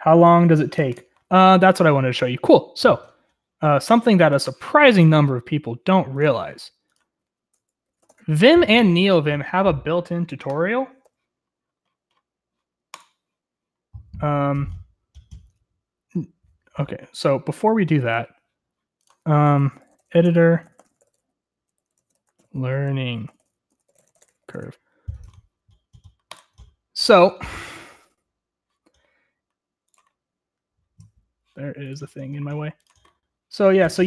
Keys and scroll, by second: 7.7-8.4 typing, 19.3 ctrl+t, 19.5-26.0 typing.